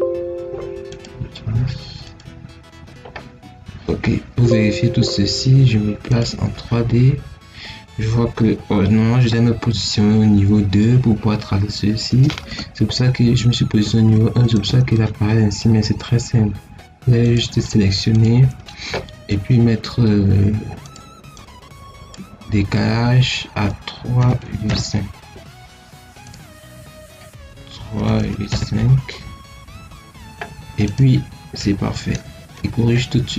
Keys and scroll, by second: 13.7 Escape, 24.1 3, 24.3 ., 24.6 5, 27.9 3, 28.1 ., 28.4 5.